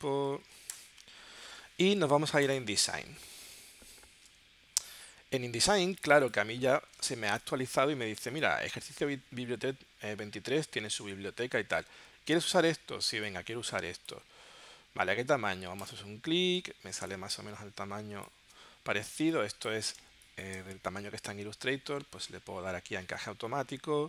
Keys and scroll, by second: 0.0-0.8 typing, 3.6 super+Tab, 19.2 space, 20.0 space.